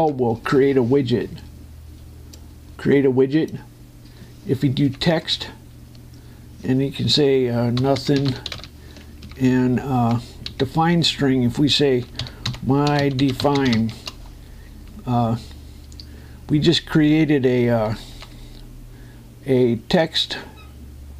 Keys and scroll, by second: 5.9 Down, 5.9 space, 10.0 Down, 12.9 shift+m, 18.0 Escape.